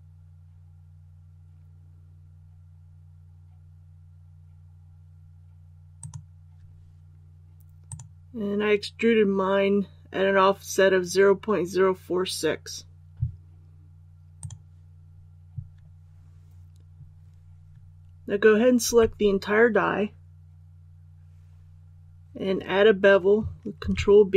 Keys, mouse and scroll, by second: 18.8 a, 23.8 ctrl+b.